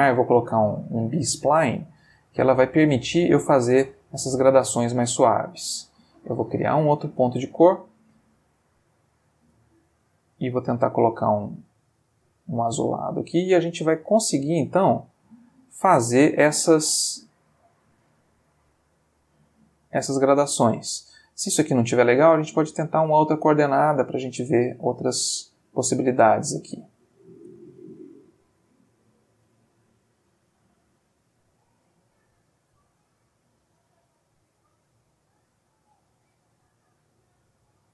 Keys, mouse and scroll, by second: 1.7-3.5 drag, 3.9-5.4 drag, 5.7 click, 7.7 click, 8.8-11.1 drag, 11.3 click, 14.0 click, 15.9-20.0 drag, 22.4-24.0 drag, 26.4-28.2 drag, 28.5-29.8 drag, 30.1-34.8 drag, 35.3-37.5 drag.